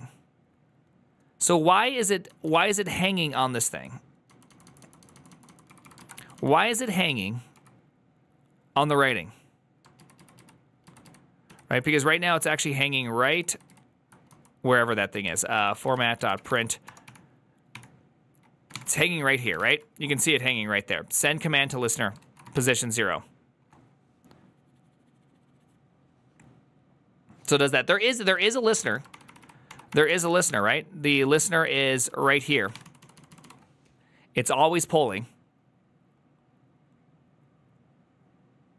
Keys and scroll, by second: 4.3-8.4 typing, 9.8 ctrl+u, 9.8 k, 10.4 ctrl+u, 10.7 ctrl+u, 11.0 ctrl+u, 12.5 ctrl+d, 12.5 ctrl+u, 13.0 ctrl+u, 13.2 ctrl+u, 13.4 ctrl+u, 13.5 ctrl+u, 14.2-20.1 typing, 21.8-22.9 typing, 28.3-29.1 typing, 29.5 ctrl+d, 30.3 ctrl+d, 30.3 shift+g, 31.0 ctrl+u, 31.2 ctrl+u, 31.9-33.9 typing.